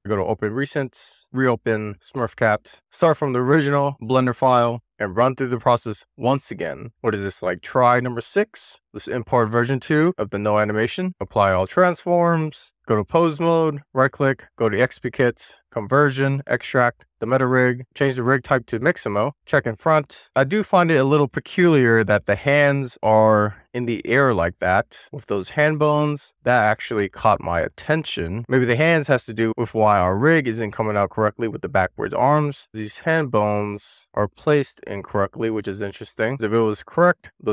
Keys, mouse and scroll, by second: 0.2-7.5 drag, 8.8 n, 8.8 click, 11.0 shift+middle click, 11.3 ctrl+a, 12.6 shift+middle click, 13.0 click, 18.1 click, 20.0 click, 22.5-23.4 scroll down 1, 23.5-25.2 shift+middle drag, 25.6-28.5 middle drag.